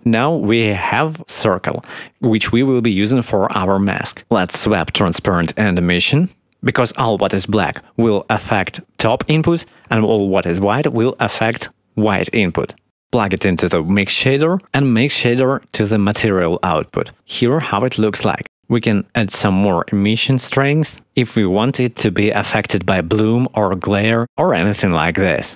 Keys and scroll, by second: 21.5 Return, 21.5 0.